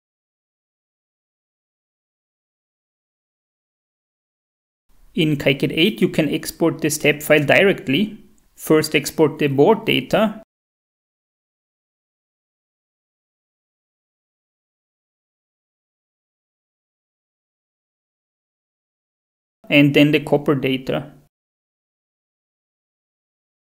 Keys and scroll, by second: 13.0-14.0 typing, 22.0-23.6 typing, 22.2 Right.